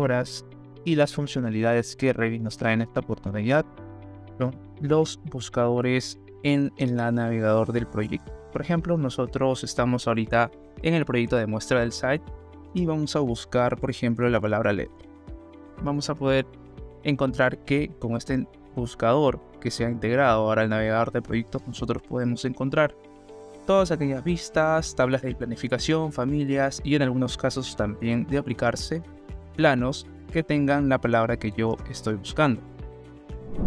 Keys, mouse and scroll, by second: 6.7 middle click, 8.4-10.4 middle drag, 13.6-15.3 typing, 31.6 BackSpace.